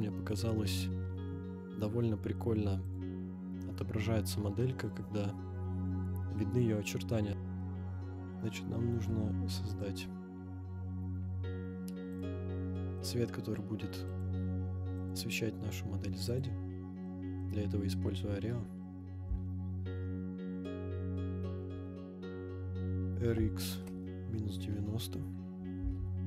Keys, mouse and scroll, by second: 1.0-1.5 scroll down 1, 1.5-2.4 scroll up 2, 2.4-2.8 scroll down 2, 2.8 click, 3.5-4.6 scroll up 1, 7.6-8.0 middle drag, 8.4-9.7 scroll up 1, 9.7 click, 12.1 click, 12.9 scroll up 1, 13.0-13.3 middle drag, 14.1-17.0 drag, 17.0-17.5 middle drag, 17.6-19.1 scroll down 2, 19.1 r, 19.2 x, 20.7-23.2 typing, 24.0 Return, 25.8 g, 25.9 y.